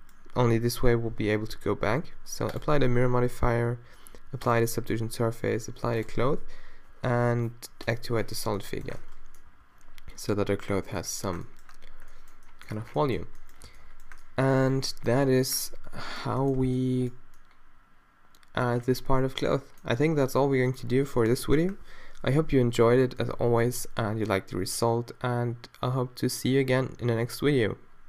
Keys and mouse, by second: 9.5 a, 13.3 a, 13.7 a.